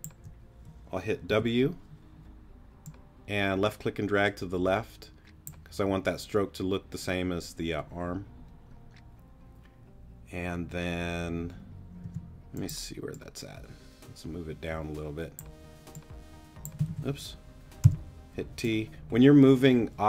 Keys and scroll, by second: 1.3 alt+w, 12.0 t, 16.9 super+z, 17.8 super+t.